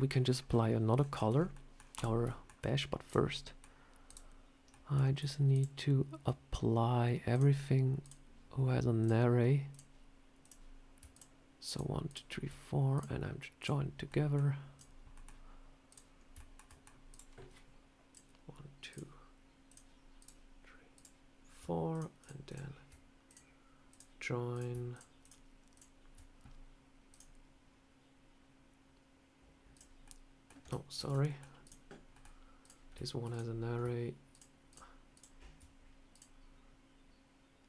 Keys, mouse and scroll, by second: 0.0 scroll down 1, 0.9 shift+middle click, 1.1 shift+scroll down 1, 1.2 scroll up 3, 1.4 middle click, 1.7 scroll down 1, 1.8 click, 2.2 shift+middle click, 2.9 click, 3.2 middle click, 3.9 click, 4.6 middle click, 5.4 shift+click, 7.2 click, 7.9 click, 8.0 shift+click, 8.9 click, 9.6 click, 10.3 click, 11.0 shift+click, 12.8 click, 14.0 middle click, 14.6 click, 15.0 middle click, 15.8 click, 16.1 scroll up 1, 16.3 shift+middle click, 16.6 middle click, 17.0 click, 18.0 click, 18.8 click, 19.6 click, 20.1 click, 20.8 click, 21.8 shift+click, 23.2 click, 24.4 click, 24.8 shift+click, 25.7 shift+click, 27.0 click, 29.7 click, 29.9 middle click, 30.9 ctrl+z, 31.2 middle click, 31.5 click, 32.0 middle click, 32.5 click, 33.2 click, 34.2 shift+click, 34.3 shift+click, 36.0 shift+click.